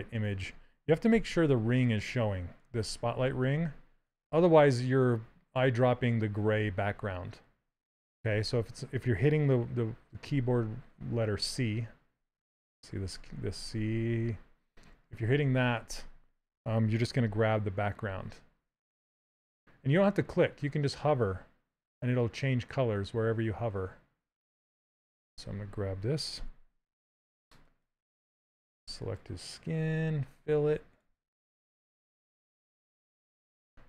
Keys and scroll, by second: 1.3 z, 11.6 c, 26.0 z.